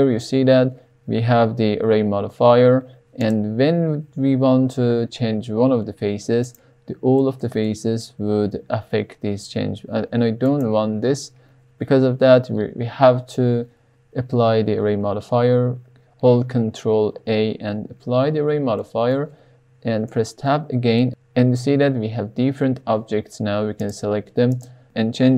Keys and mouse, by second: 3.1 click, 4.6 g, 5.1 z, 6.4 right click, 7.1 middle click, 7.6 shift+middle click, 8.5 g, 8.9 z, 10.4 right click, 11.6 Tab, 17.2 ctrl+a, 18.8 middle click, 20.1 Tab, 21.0 shift+middle click, 21.6 click, 22.0 drag, 22.9 click, 23.3 click, 23.8 click, 24.5 click, 24.8 g, 25.2 g.